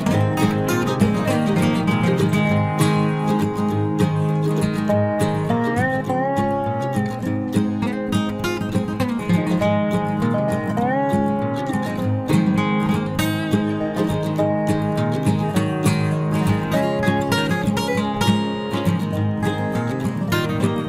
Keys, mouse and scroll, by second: 1.7 e, 3.9-6.0 drag, 6.0 KP_3, 6.3 Tab, 7.2 ctrl+s, 9.4 z, 11.5 z, 14.7 KP_3, 14.9 z, 17.4 a, 19.2 shift+a.